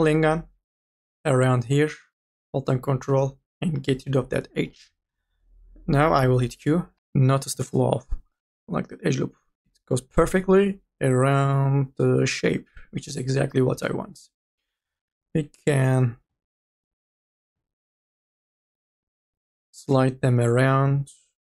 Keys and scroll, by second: 6.9 q, 13.7 q, 14.8 m, 15.2 o.